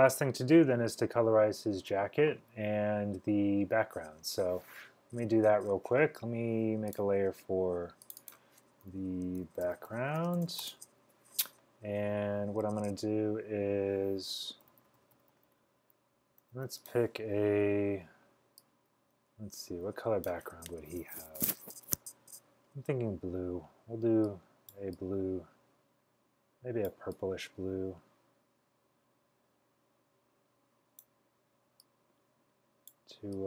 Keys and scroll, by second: 9.2-10.8 typing, 13.7-16.6 typing.